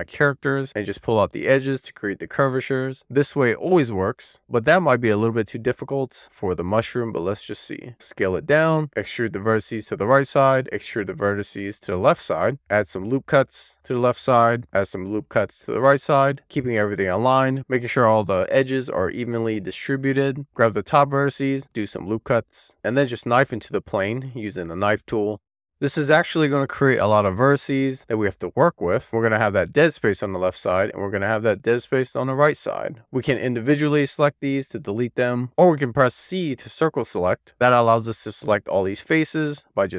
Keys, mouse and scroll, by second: 1.1 e, 2.4 r, 3.7 Tab, 4.7 1, 5.5-5.9 scroll down 2, 5.9-7.2 scroll up 1, 7.2-7.9 scroll down 1, 7.9 Tab, 8.3 scroll up 4, 8.8 d, 9.2 z, 10.5 z, 11.6 click, 12.4 click, 12.5 ctrl+Tab, 12.6 ctrl+r, 14.4 right click, 14.8 ctrl+r, 19.2 right click, 20.4 click, 20.7 d, 20.9 z, 21.3 click, 21.6 ctrl+r, 22.4 right click, 22.7 scroll up 1, 22.8 k, 27.9 k, 28.3 3, 28.5 scroll down 1, 28.8 click, 28.9 c, 30.7 click, 32.5 right click, 33.2 click, 35.7 c, 37.3 click.